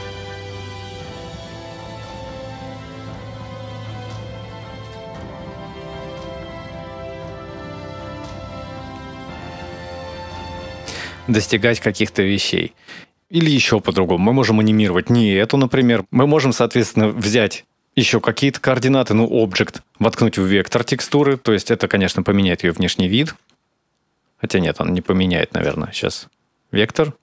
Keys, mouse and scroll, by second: 4.6 click, 7.6 space, 13.2 middle click, 13.2-13.5 scroll down 3, 13.2 space, 14.4 right click, 16.0 middle click, 16.0 scroll down 4, 16.2 click, 18.9 click, 21.8 ctrl+shift+click, 23.7 scroll up 3, 24.1-24.8 scroll down 1, 24.8-25.4 scroll down 1, 25.5 click.